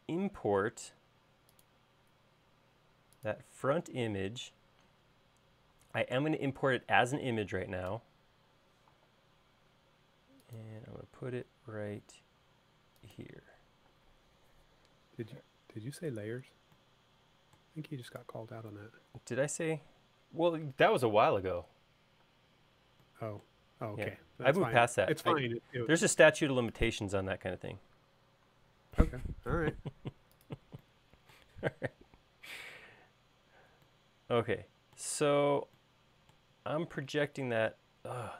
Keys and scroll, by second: 8.5 Return, 14.6 space, 16.0 m, 23.0 space, 26.6 m.